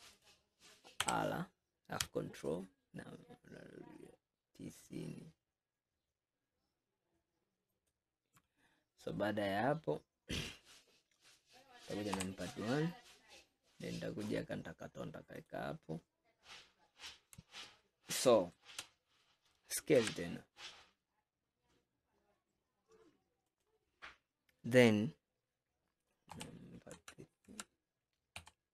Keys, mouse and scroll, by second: 1.1 r, 9.0-9.9 scroll down 4, 9.9-10.3 scroll up 4, 11.0 scroll down 2, 12.2 KP_1, 14.4 click, 15.5-16.1 drag, 16.1 scroll up 3, 17.1 scroll down 1, 17.8-19.3 shift+middle drag, 19.3-20.0 scroll up 1, 20.0 s, 26.4 KP_1, 27.0 KP_Enter, 27.5 KP_Enter, 28.4 KP_3.